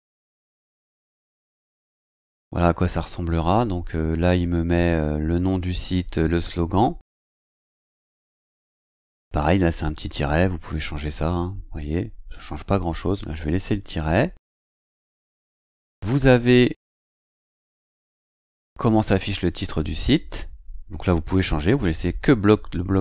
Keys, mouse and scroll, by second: 1.6-2.5 scroll down 2, 2.5 scroll up 1, 11.0 click, 13.1 click, 14.0-18.5 scroll down 2.